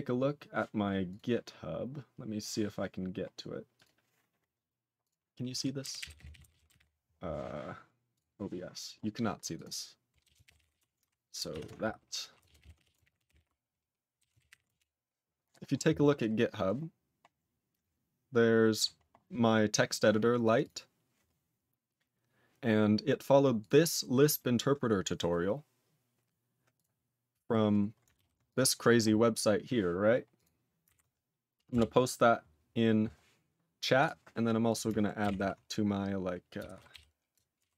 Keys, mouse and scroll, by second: 34.0 scroll up 2, 34.7 click, 34.7 click.